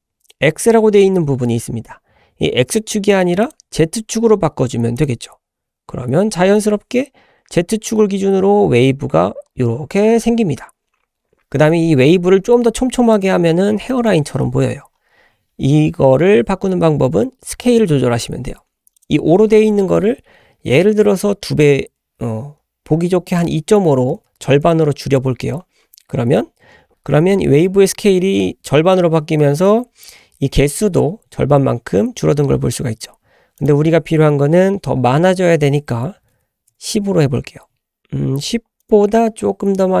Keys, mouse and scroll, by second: 3.5-5.2 drag, 9.0 scroll up 1, 11.4 middle click, 13.1 drag, 13.4-13.9 scroll down 1, 13.9 middle click, 13.9 scroll down 1, 14.1-15.3 scroll up 6, 19.0-25.5 drag, 33.6-37.0 drag, 38.8-40.0 drag.